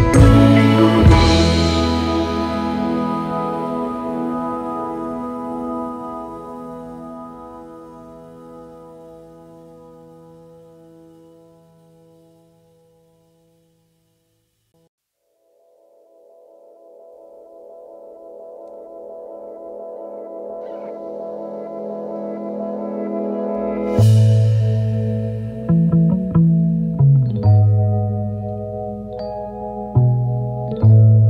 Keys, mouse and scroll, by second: 12.6-13.1 alt+scroll down 9, 13.5 v, 13.9 alt+scroll up 1, 15.0 alt+scroll up 10, 15.7 right click.